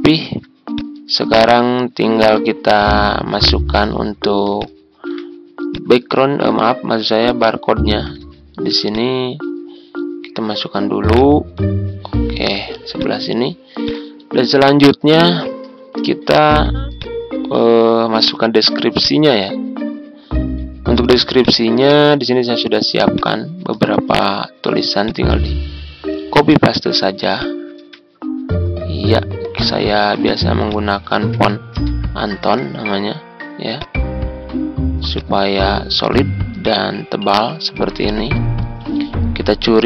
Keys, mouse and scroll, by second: 0.2 ctrl+z, 0.7 click, 2.2 ctrl+g, 2.7-4.3 drag, 5.6 click, 6.1 ctrl+scroll up 1, 7.2-10.3 shift+drag, 11.1-12.4 ctrl+drag, 12.9 click, 15.4 ctrl+scroll down 1, 16.1-16.5 ctrl+scroll down 1, 16.9-23.7 drag, 25.0 click, 30.1 click, 31.3-31.8 typing, 33.7 click, 39.7 click.